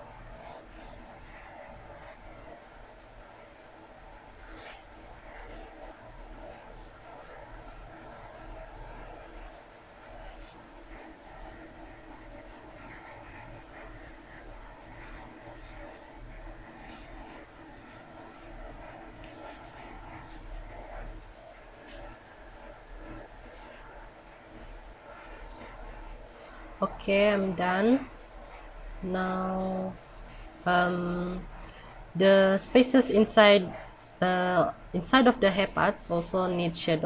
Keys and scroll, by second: 0.4 scroll up 1, 1.2 scroll down 1, 3.7 scroll up 1, 4.2 scroll down 1, 11.1 scroll up 1, 12.5 scroll down 1, 18.4 scroll up 1, 19.8 scroll down 1, 20.6 scroll down 1, 23.2 scroll up 1, 24.6 scroll down 1, 27.5 scroll up 1, 28.5 scroll down 1, 32.7 scroll down 1.